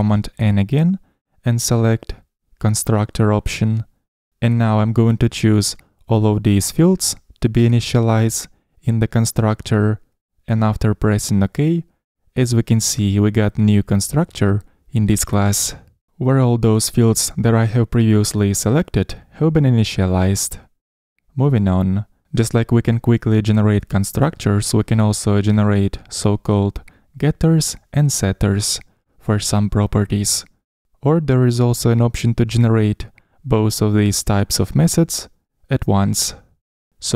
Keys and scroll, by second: 2.3 super+n, 12.6 shift+Up, 21.4 Escape, 26.5 super+n.